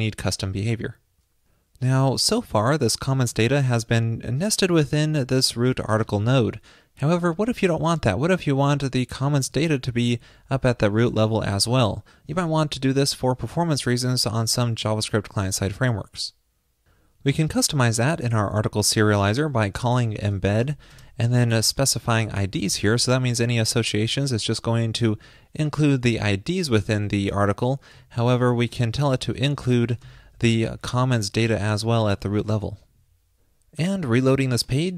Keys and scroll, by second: 23.4 alt+shift+Left, 30.8 alt+shift+Left, 32.2 super+s.